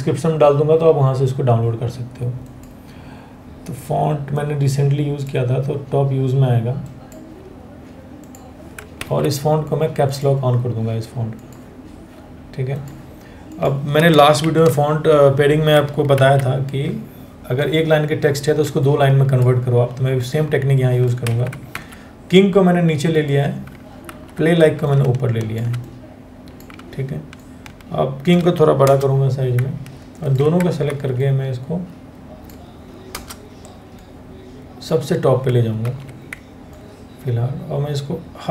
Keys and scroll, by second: 3.1 ctrl+a, 8.7 ctrl+a, 14.0 shift+Down, 15.8 ctrl+x, 20.9 ctrl+a, 21.3 ctrl+v, 23.7 ctrl+t, 28.4 Return, 29.7 Return, 30.5 ctrl+t, 32.8 Return, 35.5 ctrl+t.